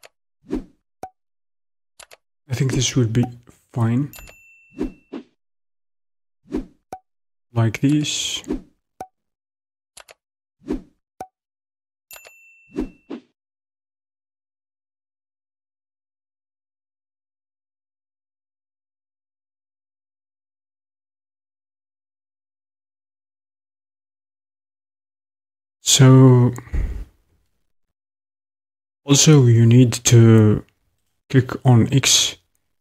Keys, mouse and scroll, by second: 1.8-13.6 drag, 2.1 middle click, 15.4 click, 16.8 s, 21.8-27.9 drag, 31.1 click.